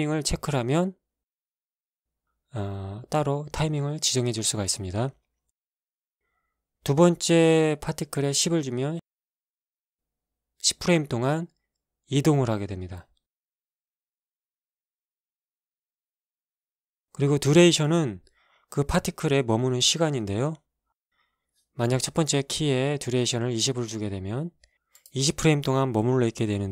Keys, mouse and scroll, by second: 1.0 click, 2.0 alt+a, 4.3 Escape, 5.2 click, 7.6 click, 8.7-9.7 drag, 9.7 KP_1, 9.9 KP_0, 10.2 Return, 13.7 alt+a, 15.1 Escape, 21.2 click, 22.1 click, 23.0 KP_2, 23.0 KP_0, 23.5 Return, 24.7 alt+a.